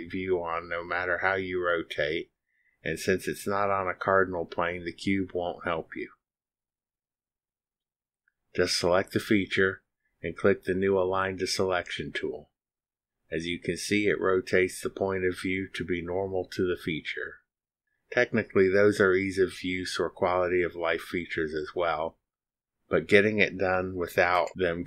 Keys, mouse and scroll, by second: 7.8 click, 13.9 click, 16.1 middle click, 20.7-24.8 drag.